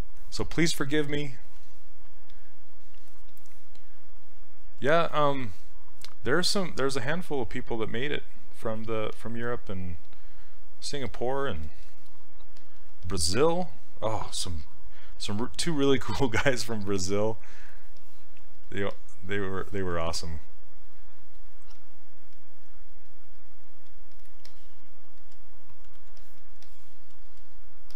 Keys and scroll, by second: 21.8 s.